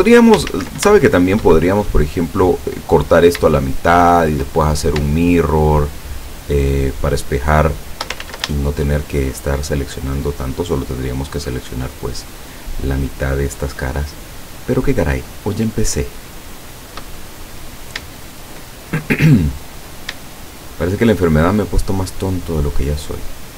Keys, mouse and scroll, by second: 0.5 ctrl+z, 1.0-3.5 ctrl+shift+middle drag, 3.8 shift+middle click, 4.6-4.9 shift+scroll up 2, 5.9 shift+right click, 6.4 shift+right click, 7.0 shift+right click, 7.5 shift+right click, 8.2 ctrl+shift+z, 8.6 ctrl+shift+right click, 9.1 ctrl+shift+right click, 9.7 shift+right click, 10.3 shift+right click, 12.0 shift+right click, 12.4 shift+right click, 13.1 shift+right click, 13.6 shift+right click, 14.2 shift+right click, 14.5 shift+right click, 15.3 shift+right click, 15.8 shift+right click, 16.8 shift+right click, 17.3 shift+middle click, 18.8 shift+scroll up 2, 19.1 shift+middle click, 20.4 shift+right click, 21.0 shift+right click, 21.6 shift+right click, 22.3 shift+right click, 22.9 shift+right click.